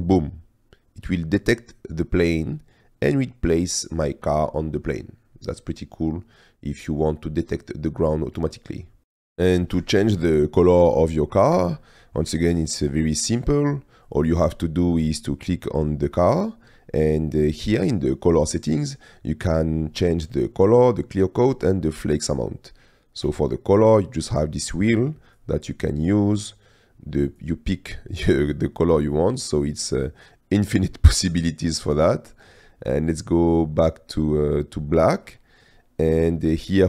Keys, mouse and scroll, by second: 0.3 middle click, 1.4 middle click, 5.8-6.3 middle drag, 6.3-7.1 drag, 8.4-8.9 drag, 11.3 middle click, 12.0 shift+middle click, 12.3-12.8 scroll up 2, 12.8 middle click, 15.9 click.